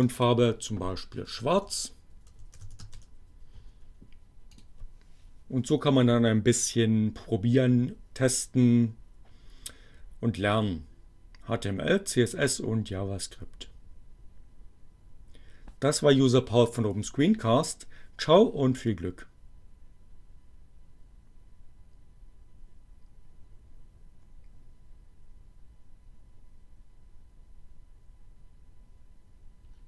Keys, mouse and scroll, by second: 0.0 BackSpace, 2.1-3.3 typing, 4.6 click.